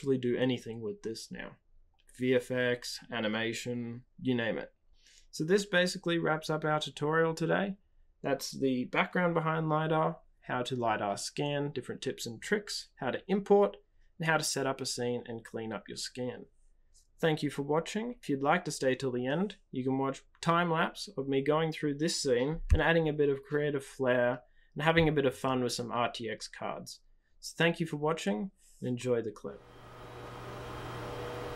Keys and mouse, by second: 4.2 drag, 4.4 middle drag, 4.6 click, 4.6 right click, 7.0-7.6 shift+middle drag.